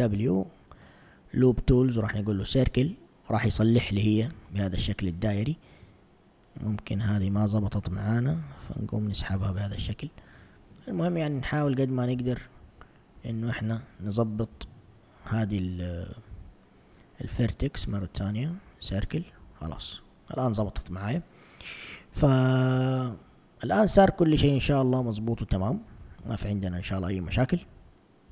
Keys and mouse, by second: 4.5 a, 6.4 click, 7.9 g, 10.2 Escape, 11.7 super+z, 12.2 super+z, 12.7 super+z, 13.2 super+z, 14.9 shift+click, 16.3 w, 19.8 a, 22.2 a, 22.8 a, 23.6 alt+click, 25.7 z, 26.3 a, 27.7 a.